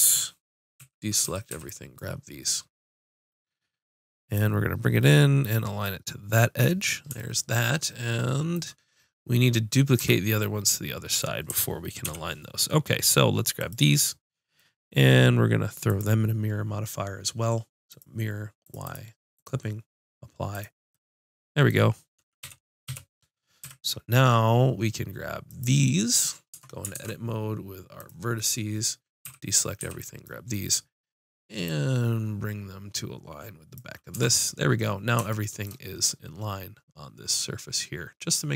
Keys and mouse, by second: 0.8 a, 1.3 a, 1.5 b, 4.4-6.4 drag, 6.7-10.0 middle drag, 10.0 Tab, 12.1 z, 12.1 KP_5, 13.6 click, 16.6-17.8 drag, 18.7-22.4 drag, 22.4 KP_7, 22.9 KP_5, 23.6 z, 25.5-26.6 drag, 26.6 Tab, 29.3 a, 29.8 b, 30.7-31.8 middle drag, 31.8-33.6 drag, 34.2 Tab, 37.4-38.5 middle drag.